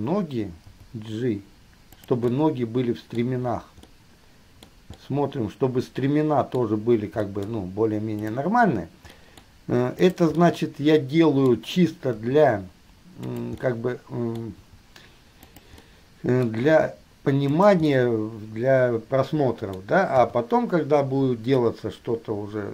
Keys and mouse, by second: 0.9 g, 2.5-3.4 middle drag, 4.0 middle click, 5.2-7.5 middle drag, 8.5-9.4 middle drag, 9.8 middle click, 10.3 middle drag, 11.8-14.0 middle drag, 12.4 g, 15.7 g, 16.2-16.7 middle drag, 16.9 g, 18.3-20.3 middle drag, 20.3 KP_3, 21.8-22.7 middle drag.